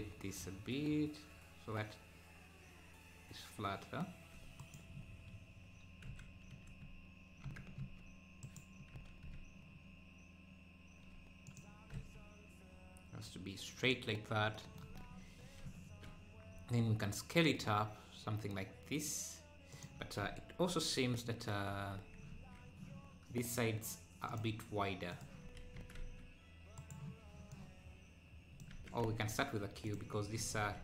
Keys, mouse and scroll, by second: 4.9-6.0 scroll up 5, 6.0 r, 6.3 r, 9.0 r, 12.0 r, 14.9-15.7 scroll down 7, 16.5 s, 20.7 KP_7, 20.9 KP_7, 21.7 Tab, 22.3 z, 24.3-25.4 drag, 25.4 a, 25.7 s, 27.5 click, 28.7 Tab, 29.1 x, 30.5 shift+a.